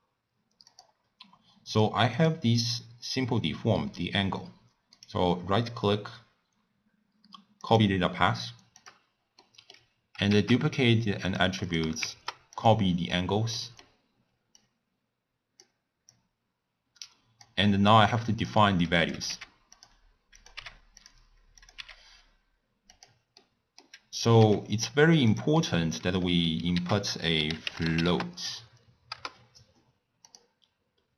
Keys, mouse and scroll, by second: 0.7 click, 1.7 click, 2.2 click, 5.0-8.9 right drag, 8.9 click, 9.5-10.8 middle drag, 10.8 shift+d, 11.7-13.0 drag, 13.6-14.7 middle drag, 14.7 click, 16.2 click, 17.9 click, 19.0 click, 19.4 g, 20.5 click, 20.6 g, 21.7 click, 21.8 g, 23.5 middle click, 24.5 g, 25.7 middle click, 26.2 scroll down 3, 26.8 ctrl+a.